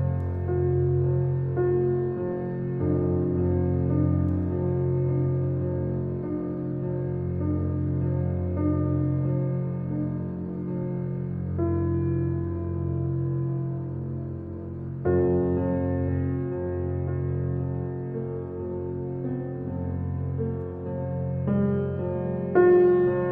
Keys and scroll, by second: 12.6 shift+b, 12.7 shift+g, 13.0 shift+m, 13.4 shift+Return, 14.6 Return, 20.9 1, 21.4 8.